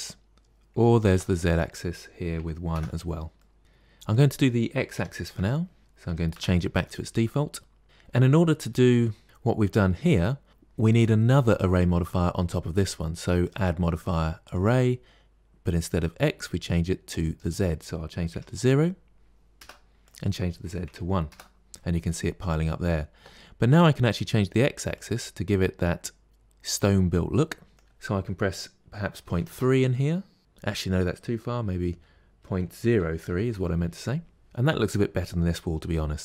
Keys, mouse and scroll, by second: 0.3-3.2 drag, 3.2 middle click, 3.9-7.8 drag, 13.3-15.1 drag, 15.1 scroll down 3, 17.3-22.9 drag, 23.3 ctrl+z, 24.8 click, 26.2 click, 27.7-30.4 drag.